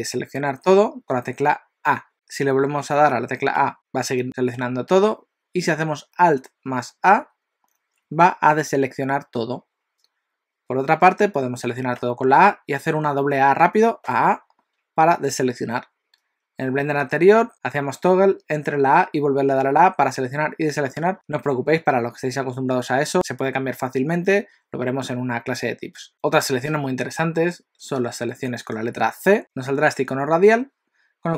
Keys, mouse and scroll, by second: 3.5 a, 7.9 alt+a, 12.0 a, 14.1 a, 14.2 a.